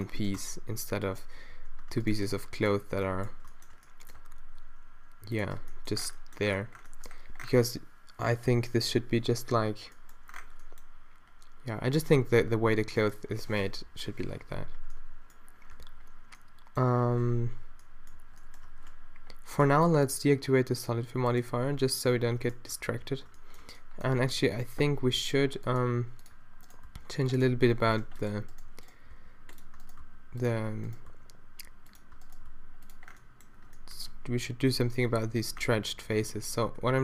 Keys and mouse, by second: 0.4 Tab, 1.0 middle click, 1.4 z, 2.9 z, 4.2 g, 5.6 Tab, 13.0 click, 13.9 shift+Left, 14.6 alt+a, 16.0 alt+a, 17.4 z, 18.2 z, 22.8 Tab, 24.9 ctrl+r, 26.9 d, 27.8 a, 28.1 ctrl+r, 29.1 d, 30.0 d, 31.1 d, 32.5 d, 33.1-34.5 middle drag, 36.9 d.